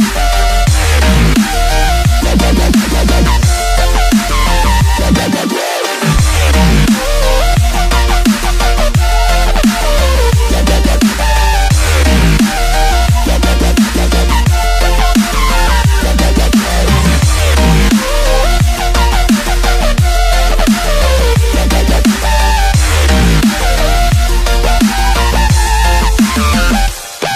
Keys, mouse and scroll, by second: 0.0-5.8 middle drag, 5.8 click, 7.0 click, 8.2 KP_7, 13.2 ctrl+click, 16.4 ctrl+click, 18.0 click, 18.7 click, 19.8 ctrl+click, 20.4-21.9 middle drag, 21.9 ctrl+click, 22.9 ctrl+click, 23.8 ctrl+click, 24.9 ctrl+click, 25.6-26.0 scroll up 3, 26.0-27.3 middle drag.